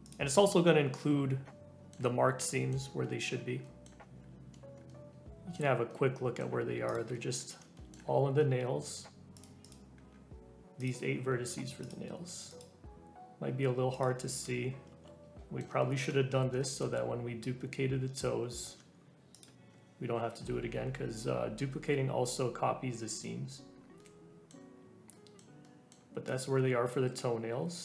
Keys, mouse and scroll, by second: 0.0-1.0 scroll up 2, 0.0 click, 1.0 Tab, 1.4 scroll up 1, 1.4 middle click, 2.2 Tab, 2.5 middle click, 2.7 Tab, 3.0 middle click, 3.4 scroll up 1, 3.6 middle click, 4.0 Tab, 4.5 Tab, 4.9-6.9 middle drag, 6.9 click, 7.1 middle click, 8.1 scroll up 1, 8.4-9.4 middle drag, 9.4 click, 9.7 click, 10.0-10.8 scroll up 2, 10.8 scroll up 1, 10.8 alt+click, 11.2-11.6 scroll down 1, 11.9 alt+shift+click, 12.6 alt+shift+click, 14.0 alt+shift+click, 14.6-14.9 scroll up 1, 14.9 ctrl+z, 15.4 middle click, 16.2 scroll up 1, 16.6 shift+middle click, 17.2 scroll up 1, 18.2 alt+z, 19.4 alt+shift+click, 19.5 Tab, 19.7 Tab, 20.1-21.3 scroll down 3, 21.3-21.7 scroll up 1, 23.0 middle click, 23.4-24.0 scroll down 1, 24.0-26.4 middle drag, 26.4 Tab.